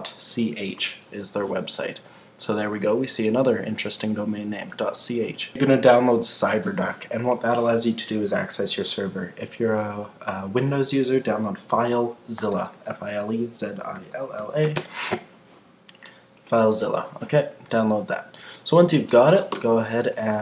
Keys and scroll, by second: 14.7 Return.